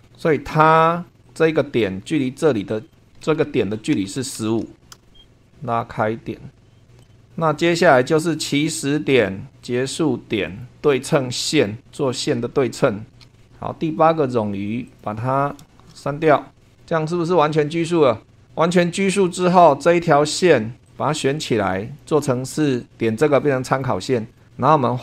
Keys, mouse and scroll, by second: 0.0 super+2, 1.2 click, 2.9 click, 3.7-5.1 typing, 5.4 click, 6.5 click, 7.0 click, 9.1 click, 10.4 click, 11.5 click, 13.1 s, 14.2 scroll down 2, 14.8 click, 16.5 Delete, 18.8-20.3 scroll up 2, 20.8-22.2 drag, 23.6 click, 24.3 click.